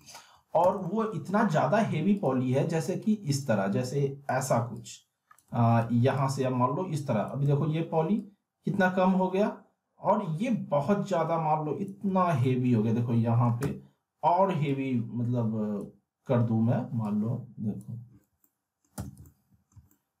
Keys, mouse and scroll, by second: 0.0 middle click, 0.6 z, 0.8-1.5 alt+middle drag, 2.1 click, 5.8 ctrl+z, 6.1-7.4 click, 7.4 ctrl+z, 8.2-11.9 drag, 12.0 z, 12.6-13.7 alt+middle click, 13.6 z, 14.7-15.9 drag, 18.4-19.1 alt+middle click, 18.9-19.8 z, 19.7 alt+middle click, 20.0-20.2 middle click.